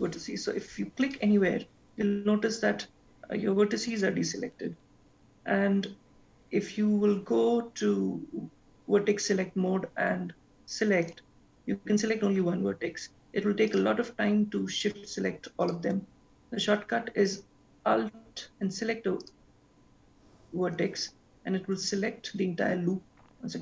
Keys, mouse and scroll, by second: 1.0 click, 11.1 click, 13.7 shift+click, 14.8 shift+click, 15.7 shift+click, 19.3 alt+click.